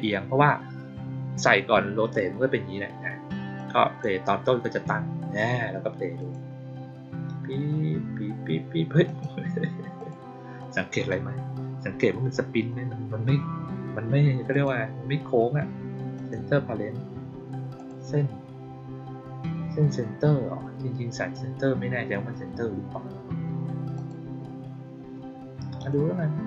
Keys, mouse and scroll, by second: 3.5-3.9 drag, 6.1 click, 9.0 click, 9.9 click, 10.5-11.0 drag, 14.4 click, 16.1 click, 17.7 click, 23.8 click, 25.7 click.